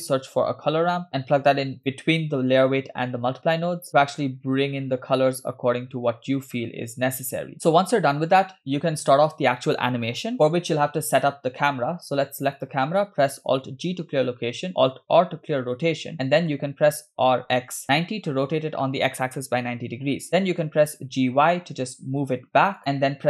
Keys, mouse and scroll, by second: 3.9-6.6 drag, 7.7-8.3 scroll down 4, 8.4 scroll up 2, 12.6 click, 13.9 alt+g, 14.9 scroll down 2, 15.5 alt+r, 16.1-16.6 middle drag, 17.8 r, 19.5-20.1 middle drag, 20.7 g.